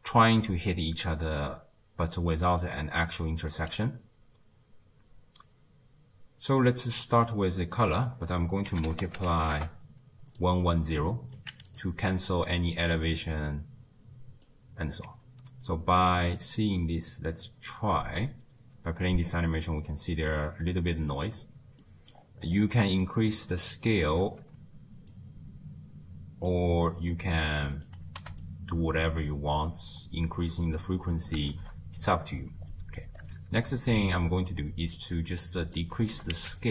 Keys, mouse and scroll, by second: 0.0-3.7 typing, 0.1 click, 1.0 click, 3.0 right click, 7.3 drag, 10.9 click, 13.3 click, 18.0 space, 18.8 space, 19.2-19.7 scroll down 3, 19.9-22.2 middle drag, 22.2-24.2 scroll up 5, 24.2 shift+space, 25.1-28.4 drag, 29.0 space, 29.8 space, 31.5 shift+space, 32.7 middle click, 33.2-33.6 scroll down 1, 33.6 middle click, 34.2-35.0 scroll down 4, 35.0 click, 36.1 g.